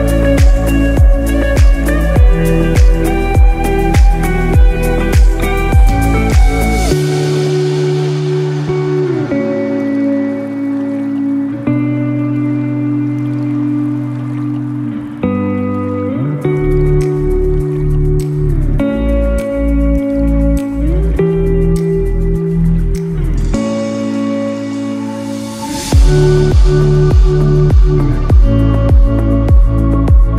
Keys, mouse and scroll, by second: 1.2 alt+z, 2.0 Tab, 2.4 scroll up 2, 3.2 scroll up 1, 3.6-4.2 scroll down 5, 4.7 scroll down 5, 4.8 shift+middle click, 5.2 middle click, 5.6 scroll up 1, 6.2 right click, 6.2-6.9 scroll up 3, 7.2 scroll up 1, 7.5-7.8 scroll down 3, 8.0 middle click, 9.1 click, 11.1 click, 12.5 scroll up 2, 13.0-13.3 scroll down 2, 13.2 middle click, 16.2 scroll up 5, 16.9 shift+middle click, 17.4-18.1 scroll up 3, 18.1-18.4 scroll down 3, 18.4 shift+middle click, 19.1 middle click, 20.3-21.0 scroll down 4, 21.0 shift+middle click, 21.4 middle click, 25.0 click, 29.5 middle click, 30.2 scroll up 2.